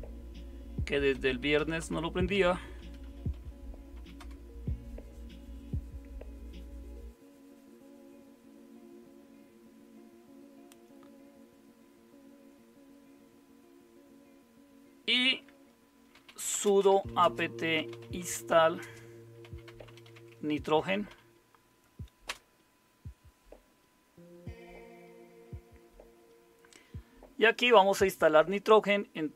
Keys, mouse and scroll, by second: 1.1-4.7 typing, 15.9-21.6 typing, 22.2 Return.